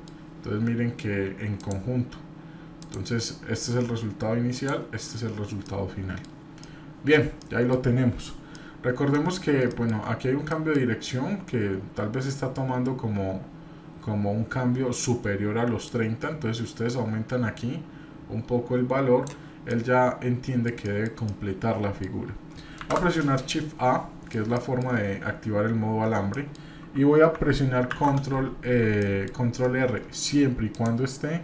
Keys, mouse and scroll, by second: 5.6-6.2 middle drag, 6.6 middle click, 6.6-7.1 scroll down 1, 7.4 middle click, 8.5-9.1 middle drag, 10.5 shift+middle click, 10.5 scroll up 1, 19.7-20.6 middle drag, 21.2-22.0 shift+middle drag, 21.2 scroll down 1, 23.3-24.3 middle drag, 26.3 shift+middle click, 29.0 middle click.